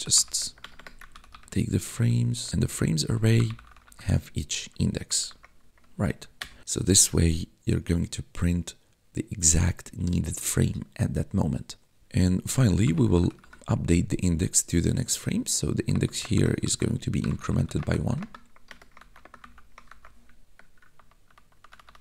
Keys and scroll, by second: 0.0-5.5 typing, 6.3 Return, 12.0-13.8 typing, 15.8-20.3 typing, 20.8 ctrl+-.